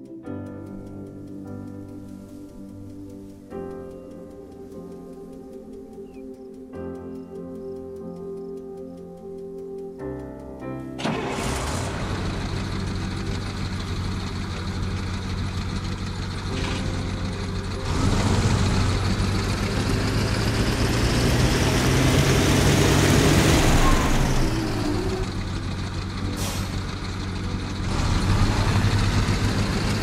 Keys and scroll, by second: 18.8 w, 23.3 a, 23.7 s, 27.8 w.